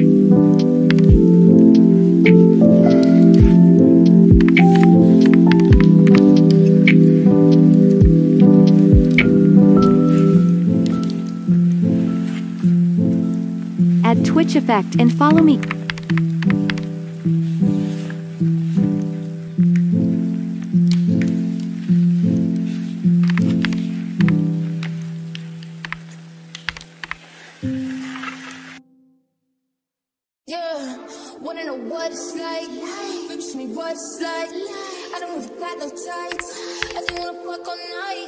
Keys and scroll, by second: 4.4-6.0 typing, 15.4-16.6 typing, 23.3-24.1 typing, 25.8 1, 27.0 typing, 36.4-37.0 typing.